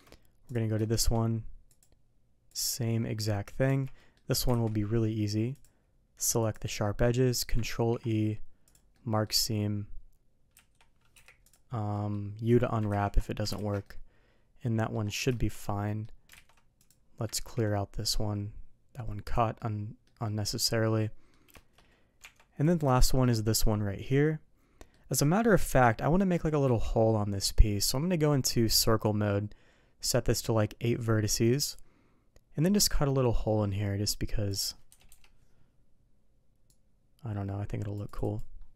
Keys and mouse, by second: 0.4 click, 0.8 shift+middle drag, 1.7 click, 3.6 Tab, 3.9 middle click, 4.5 alt+a, 5.5-6.5 drag, 6.8 middle drag, 7.7 ctrl+e, 8.9-9.2 middle drag, 10.5 a, 11.1 u, 11.9 middle click, 12.9 ctrl+z, 13.8-14.9 ctrl+shift+middle drag, 15.3 middle drag, 15.8 ctrl+shift+middle click, 16.3 ctrl+alt+shift+a, 17.3 ctrl+e, 19.5-20.0 middle drag, 20.2-20.5 middle drag, 21.0-21.3 middle drag, 21.5 shift+middle drag, 22.2 Tab, 22.9 middle drag, 23.4-24.9 middle drag, 25.6 KP_3, 26.6 d, 32.9-35.7 drag, 36.7-38.4 drag.